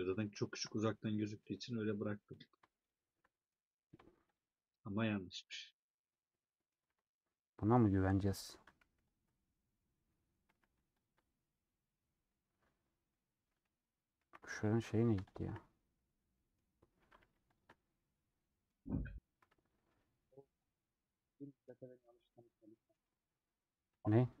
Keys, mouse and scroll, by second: 0.3 shift+x, 1.0-2.5 middle drag, 2.5 click, 3.1-4.4 shift+middle drag, 4.4 shift+click, 5.1 shift+click, 5.4 shift+x, 6.1 middle click, 6.8 alt+z, 7.0 scroll down 2, 7.2-8.6 middle drag, 8.6 a, 9.3 scroll down 2, 9.4 scroll up 1, 9.5-10.6 middle drag, 10.6 a, 12.5-13.0 scroll down 2, 13.0-14.4 middle drag, 14.4 2, 14.5-15.8 alt+drag, 16.0 scroll down 1, 16.3 middle click, 17.2 a, 17.9-19.6 middle drag, 19.6 Tab, 21.9 Tab, 22.1-24.4 middle drag.